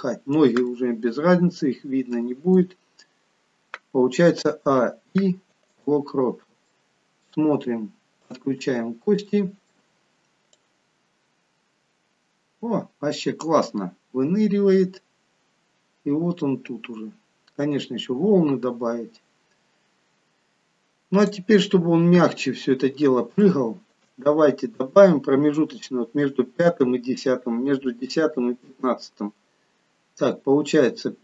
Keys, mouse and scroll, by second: 0.8 middle click, 2.4 middle click, 4.5 a, 4.8 i, 6.3-8.3 scroll down 3, 6.7 middle click, 8.3 click, 8.7-9.3 scroll up 2, 9.3 middle click, 10.7 click, 21.7-22.8 scroll down 7, 23.0-23.4 scroll down 1, 23.5 shift+middle click.